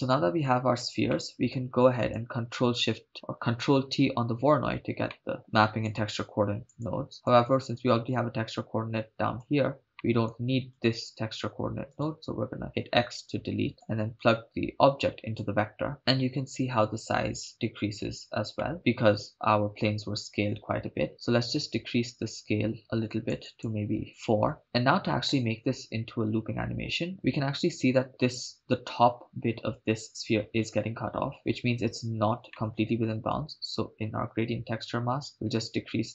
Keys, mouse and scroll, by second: 1.1 middle click, 2.0 click, 3.9 ctrl+t, 5.1 middle click, 5.4 click, 7.1 click, 8.1-9.9 drag, 9.9 middle click, 10.7 click, 10.8 click, 11.9 click, 12.7 x, 13.8-15.5 drag, 18.6 middle click, 21.1-24.3 drag, 27.1 scroll up 5, 32.5 middle click, 35.3 click.